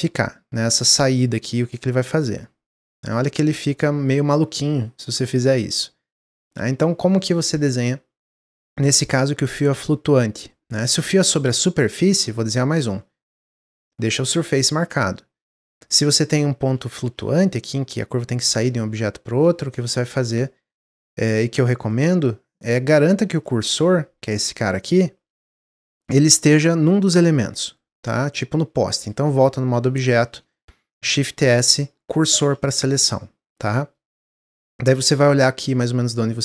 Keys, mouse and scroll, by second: 0.1-2.1 drag, 2.1-3.2 middle drag, 3.2 scroll down 2, 3.5-6.5 middle drag, 8.3 middle click, 8.7 ctrl+z, 9.0-11.2 middle drag, 11.2-11.5 scroll up 2, 12.3-15.3 drag, 15.7 click, 16.0-24.4 middle drag, 24.4-27.2 drag, 27.2-28.4 middle drag, 28.4 Tab, 28.9 click, 29.9-31.0 middle drag, 31.0 shift+s, 33.5-34.1 middle drag, 34.1-34.5 scroll down 1, 34.6-36.4 middle drag.